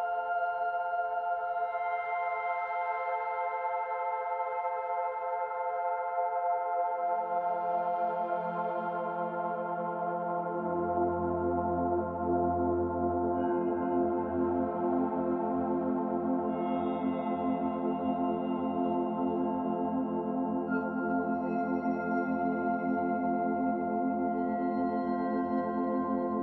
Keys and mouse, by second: 0.6 Tab, 1.3 Tab, 1.8-3.5 middle drag, 3.9 Tab, 4.3 click, 5.9 Tab, 5.9 middle click, 8.7 Tab, 9.1 Tab, 10.8 click, 13.1 middle click, 14.3 shift+a, 16.2 click, 16.7 Tab, 17.0 Tab, 17.4 Tab, 17.4 click, 18.3 h, 19.6-20.5 middle drag, 21.9 g.